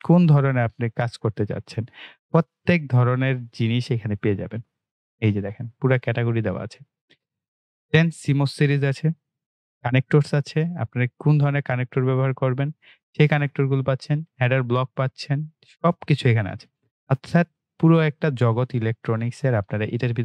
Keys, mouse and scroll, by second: 0.3 click, 0.8-1.4 scroll down 1, 8.1 click, 13.0 click.